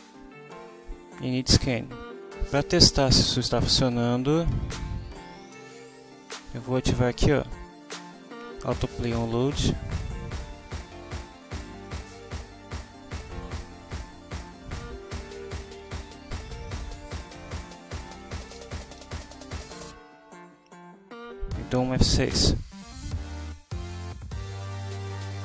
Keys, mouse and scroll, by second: 9.7 click, 12.1 click, 13.8 click, 14.4 click, 15.1 Return, 15.2-19.5 typing, 19.5 Down, 22.6 F6.